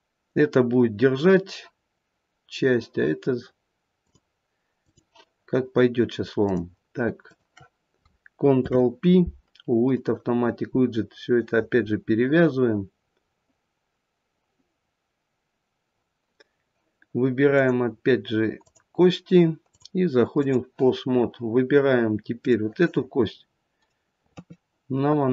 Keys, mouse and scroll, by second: 3.9 click, 6.3 click, 7.1 shift+click, 7.5 shift+click, 8.5 ctrl+p, 17.5 click, 18.6 click, 19.6 click, 22.3 click, 24.3 KP_3.